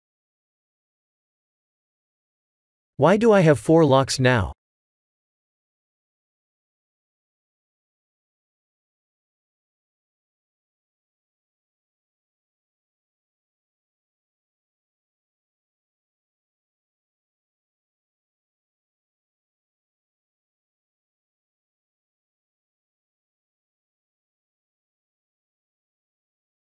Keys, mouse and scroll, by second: 5.7 click, 7.1 click, 9.2 click, 12.2 click, 14.7 click, 19.9 click, 20.6 click, 22.1 click, 22.1 click, 23.5 click.